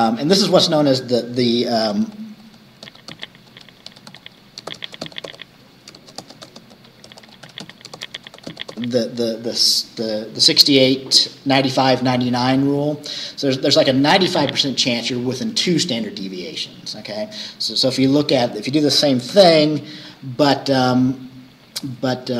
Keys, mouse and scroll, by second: 0.3 click, 1.9 Return, 2.7-9.3 typing, 13.7 Right, 19.4 shift+Return, 20.6 click, 21.9 click.